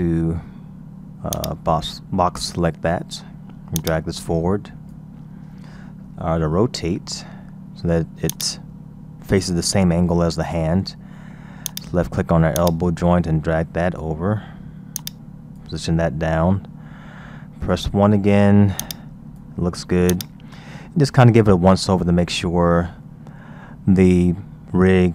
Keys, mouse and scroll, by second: 1.3 click, 3.8-6.4 drag, 6.4 r, 10.4-11.3 scroll down 1, 11.3-11.7 scroll down 2, 11.7 click, 12.6-16.9 drag, 16.9 KP_1, 17.6-17.9 scroll up 2, 17.9-18.9 scroll down 3, 18.9-20.6 drag, 20.9-21.9 scroll down 3, 21.9-22.5 scroll up 3, 22.5-25.1 scroll down 2.